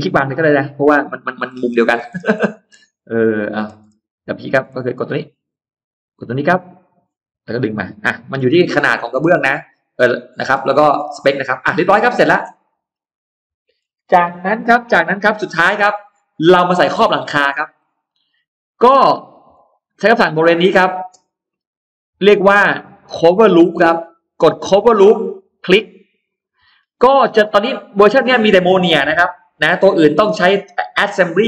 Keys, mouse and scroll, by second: 0.3 click, 0.8 space, 0.9 middle click, 1.0 Escape, 1.4-2.0 scroll down 4, 1.4 middle click, 2.2 middle click, 2.5-2.8 scroll down 2, 3.0-3.7 scroll up 2, 3.9 click, 4.4-4.8 scroll up 1, 4.8 click, 6.6 click, 7.9 click, 8.3 middle click, 8.3 space, 8.5 Escape, 8.5 scroll down 1, 8.8 Escape, 8.8-10.3 middle drag, 10.2-10.8 scroll down 1, 11.0 middle click, 11.4-12.6 scroll down 3, 11.8 middle click, 12.9 middle click, 13.6 scroll down 1, 14.7-15.0 scroll up 1, 15.2 middle click, 16.2 scroll up 1, 16.6 middle click, 16.8 scroll down 1, 17.2 middle click, 19.4 click, 25.2 click, 27.3 click.